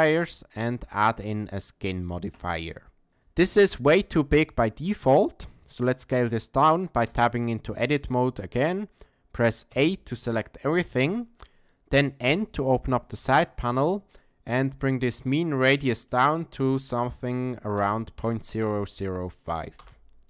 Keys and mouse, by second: 0.8-3.1 drag, 8.0 Tab, 9.7 a, 12.2 n, 15.0 click, 20.1 click.